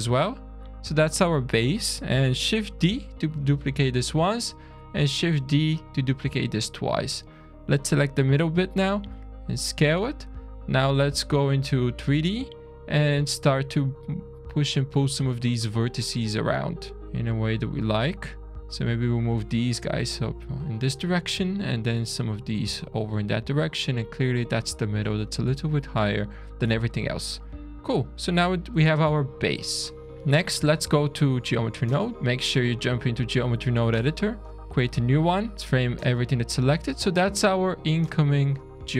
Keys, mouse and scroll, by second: 0.3 click, 1.0 scroll down 1, 1.2 middle click, 2.5 shift+d, 4.1 middle click, 4.6 shift+d, 6.3 scroll down 2, 6.9 click, 8.7 click, 10.0 shift+middle click, 10.9-11.5 scroll up 3, 11.5 click, 12.3 click, 13.4 click, 14.1 click, 14.7 click, 15.7 click, 16.5 click, 17.0 click, 17.5-17.9 shift+click, 17.9 click, 18.7-19.3 scroll down 1, 19.3 click, 20.7 click, 21.7 click, 23.0 click, 23.6 click, 25.1 click, 26.1 click, 26.7 scroll down 1, 27.2 shift+middle click, 27.7 scroll up 2, 28.7 Tab, 29.1 middle click, 30.5 click, 32.1 click, 34.4 click, 35.5 `, 35.6 middle click, 35.9-36.4 scroll down 7, 37.5 scroll up 1, 37.8 middle click, 38.3 click, 38.8 click.